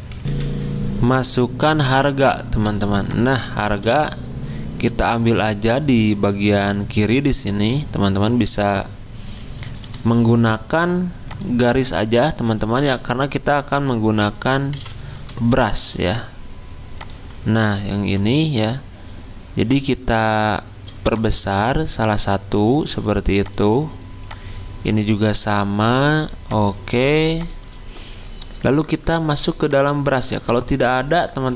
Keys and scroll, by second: 1.4 F10, 3.7 space, 9.8 p, 13.6 d, 14.7 v, 15.6 v.